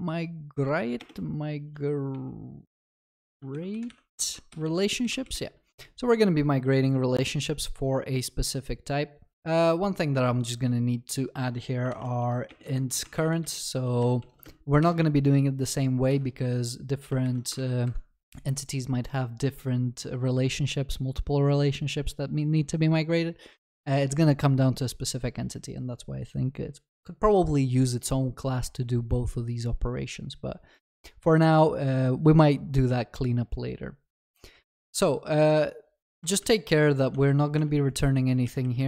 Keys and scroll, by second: 17.2 ctrl+y, 37.6 Return.